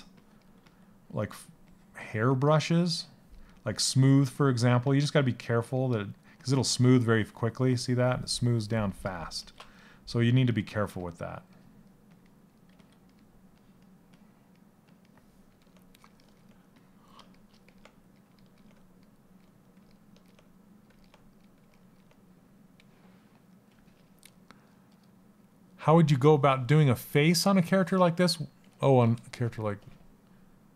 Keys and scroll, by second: 4.3 s, 10.4 s, 12.4 s.